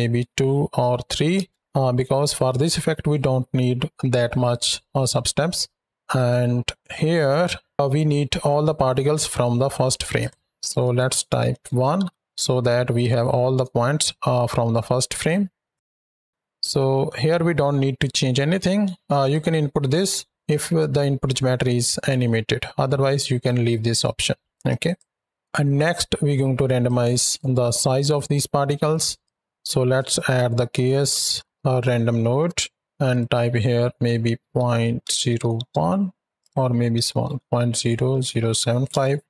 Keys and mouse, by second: 6.0 click, 10.0-11.1 drag, 11.7 shift+Right, 11.8 shift+Left, 13.6-14.4 shift+drag, 15.9 click, 19.1-20.3 drag, 23.0 ctrl+click, 24.7 click, 25.9 middle click, 26.7-27.0 drag, 27.2-27.8 drag, 28.9 click, 32.9-35.5 drag, 36.3-38.8 drag.